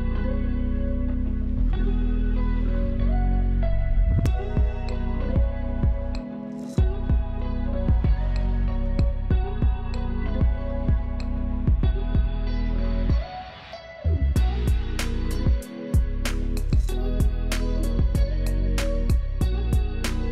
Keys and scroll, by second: 3.6 space, 5.2 space, 5.9 ctrl+KP_0, 6.5 alt+space, 8.6 space, 11.3 space, 14.5 space, 17.3 alt+space.